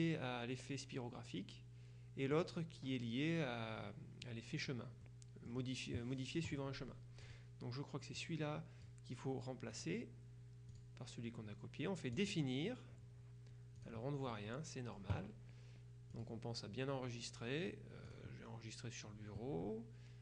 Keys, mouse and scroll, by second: 2.4 click, 5.1 middle click, 5.1 scroll down 1, 5.2-6.1 scroll up 1, 7.3 click, 8.3-9.4 drag, 9.8 right click, 10.8 click, 12.2 click, 13.9 click, 16.2 click, 18.1 click.